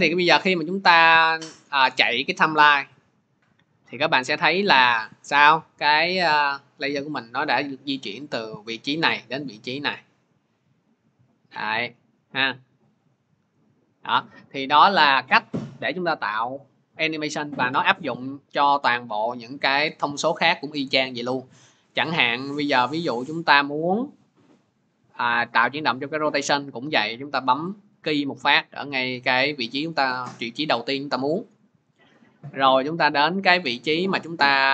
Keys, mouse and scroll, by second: 1.9 click, 14.0-32.7 drag.